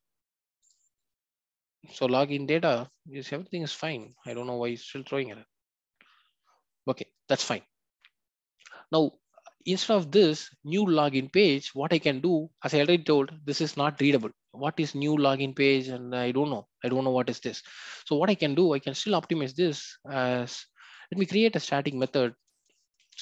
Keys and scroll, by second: 1.0 ctrl+b, 19.1 ctrl+b.